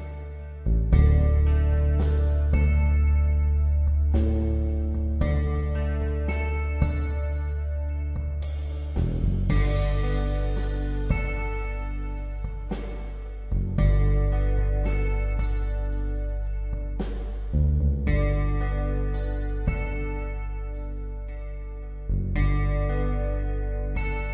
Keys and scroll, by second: 4.8 space, 5.7 space, 19.4 ctrl+j, 23.9 ctrl+z.